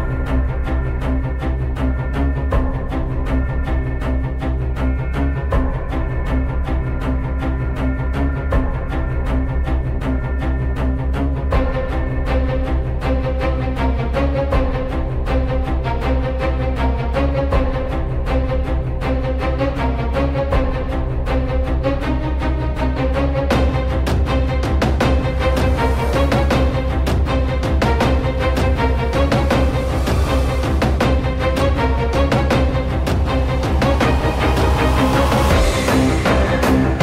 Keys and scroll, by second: 0.1-0.6 typing, 3.9-4.8 typing, 6.5 z, 7.8-9.2 typing, 11.1-13.0 typing, 15.1-16.0 typing, 19.1 m, 23.3 t, 23.4 F3, 25.4 alt+Tab, 25.8 alt+Tab, 27.7 ctrl+c, 27.8 alt+Tab, 28.4 ctrl+v, 28.4 Return, 28.5-30.1 typing, 31.5 Delete, 35.3-36.1 typing.